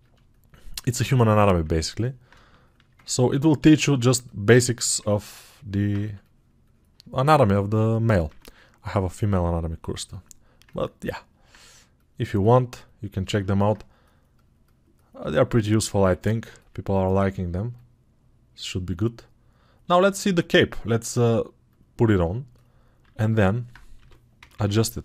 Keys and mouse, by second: 5.9 2, 22.1-25.0 alt+right drag.